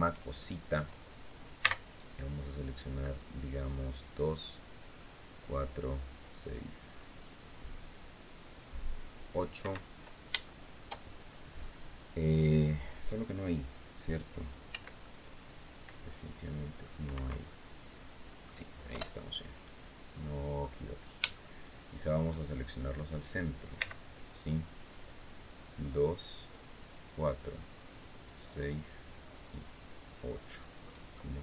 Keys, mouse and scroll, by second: 1.3 c, 3.1-9.2 drag, 9.3 Escape, 9.8 scroll down 2, 10.2 shift+middle click, 14.4 c, 14.8-16.7 middle drag, 16.8 Escape, 17.2-18.3 middle drag, 18.6 KP_7, 20.3-20.9 scroll up 2, 20.9 shift+scroll up 1, 21.1 shift+middle click, 23.5 c, 25.4 click, 26.5 click, 28.0 click, 29.8 click, 30.2 click.